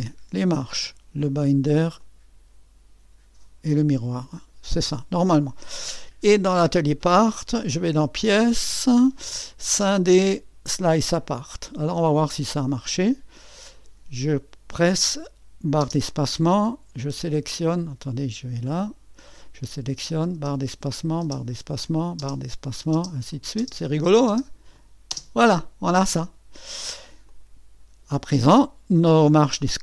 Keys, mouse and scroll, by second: 8.2-12.4 drag, 14.7-18.9 drag, 18.9 middle click, 20.0-21.3 drag, 20.4 space, 21.3 space, 22.2 space, 22.7-29.8 drag, 25.1 space.